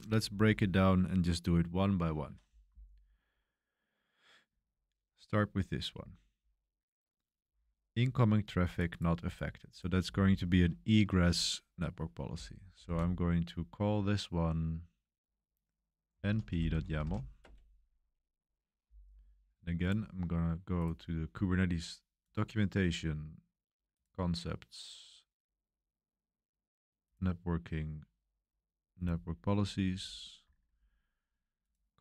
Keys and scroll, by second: 12.0-13.3 typing, 15.8-17.5 typing.